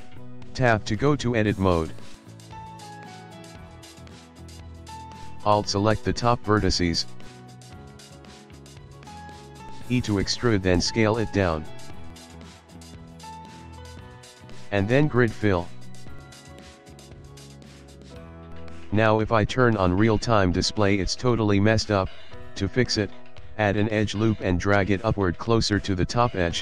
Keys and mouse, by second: 0.6 click, 1.0 middle click, 1.6 Tab, 3.3 click, 4.1 alt+click, 4.8 alt+click, 5.8 click, 6.5 alt+click, 7.5 ctrl+middle click, 8.2 shift+middle click, 8.6 ctrl+middle click, 8.9 shift+middle click, 9.4 e, 12.2 e, 15.1 click, 16.8 middle click, 17.5 middle click, 18.0 middle click, 18.1 shift+middle click, 18.6 click, 19.9 click, 21.5 shift+middle click, 22.0 middle click, 22.8 shift+middle click, 23.0 shift+middle click, 24.0 ctrl+r.